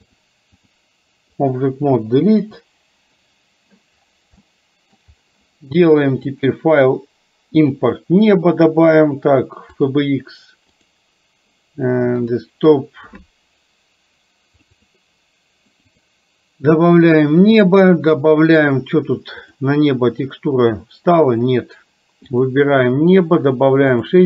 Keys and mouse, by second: 0.2 click, 1.5 click, 2.3 Delete, 4.6 middle click, 6.3-10.1 drag.